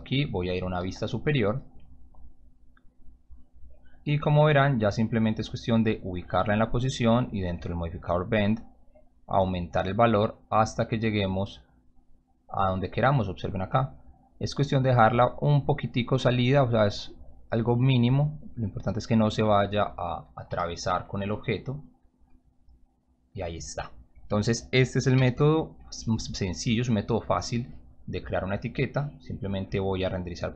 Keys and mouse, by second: 0.7 t, 3.7-5.4 drag, 6.7 click, 8.1-11.1 drag, 11.9 click, 15.4 click, 17.1-18.8 drag, 20.4 p, 25.1 c, 26.7 click.